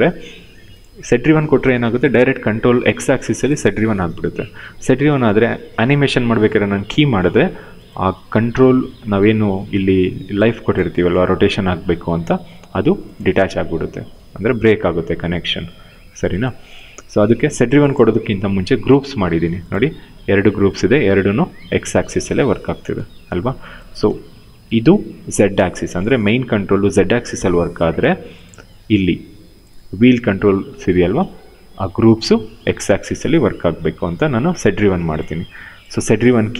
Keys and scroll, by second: 0.7 e, 2.2 ctrl+z, 8.2 w, 10.6 ctrl+z, 19.8 e, 22.7 ctrl+z, 23.7 w, 25.9 ctrl+z, 27.3 ctrl+z, 29.7 e, 33.7 ctrl+z.